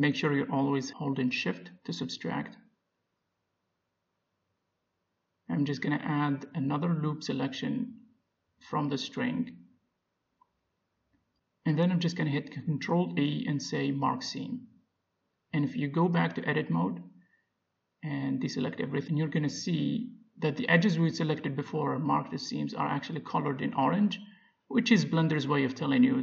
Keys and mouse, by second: 0.1 c, 0.4 middle click, 0.8 middle click, 1.4 c, 1.9 right click, 2.0 c, 2.7 right click, 3.0 c, 3.9 right click, 4.5-6.3 middle drag, 4.8 z, 7.1-9.1 middle drag, 9.2-10.9 drag, 9.8-13.4 middle drag, 12.1 ctrl+e, 14.1 middle click, 14.8 Tab, 15.3 z, 16.2 z, 17.1 Tab, 18.0 a, 19.4-20.5 middle drag, 20.7-22.6 middle drag, 25.8-26.2 middle drag.